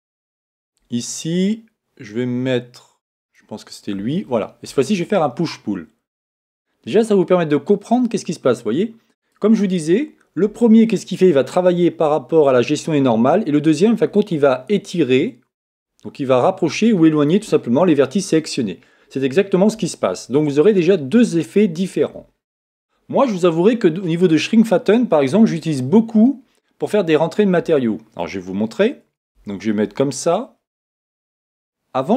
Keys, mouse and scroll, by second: 0.0 a, 3.2-5.0 right drag, 7.2 click, 29.3 Tab, 30.4-32.1 middle drag.